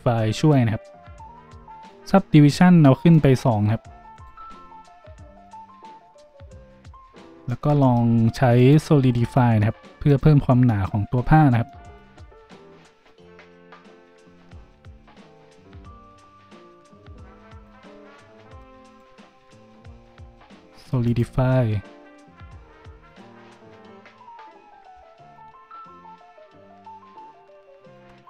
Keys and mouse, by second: 1.8 middle click, 1.9-4.1 drag, 4.1 middle click, 4.2-18.9 drag, 18.9 middle click, 19.0-24.9 drag.